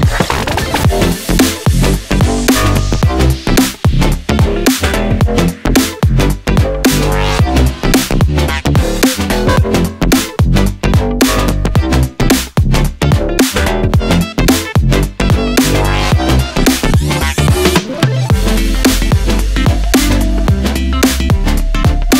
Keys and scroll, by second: 9.5 ctrl+c, 9.7 ctrl+v.